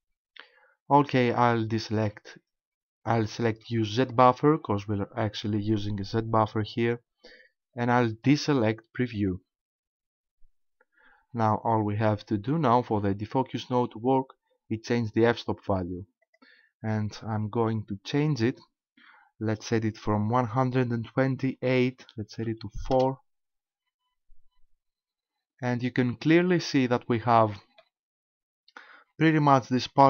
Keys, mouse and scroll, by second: 4.1 click, 9.2 click, 16.2 click, 27.0 middle click.